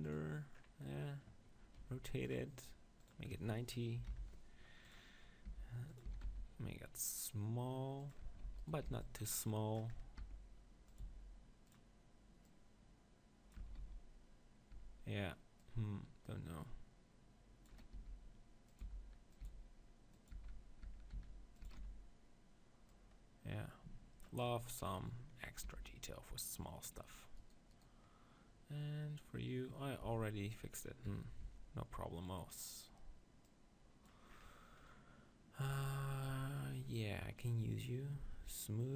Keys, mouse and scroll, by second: 1.8 middle click, 1.8 r, 2.3-4.9 drag, 5.3 middle click, 5.5 g, 6.0-7.8 drag, 6.1 s, 8.1-9.9 drag, 8.2 Tab, 8.5 z, 8.6-9.9 right drag, 8.9 b, 10.1 right click, 10.2 e, 11.0-14.4 drag, 11.0 s, 13.7 Tab, 13.8 z, 14.7 Tab, 15.6-17.4 drag, 18.1 s, 18.8-21.2 drag, 18.9 e, 19.4 s, 20.3 Tab, 20.5 z, 20.8 Tab, 21.1 s, 21.8 z, 25.0 KP_3, 25.6 g, 26.9-29.7 drag, 27.4-29.7 right drag, 30.0 Tab, 31.0 KP_1, 31.4 Tab, 32.7-33.9 drag, 33.5 right click, 34.7 click, 35.2-36.9 middle drag, 38.5-38.9 drag.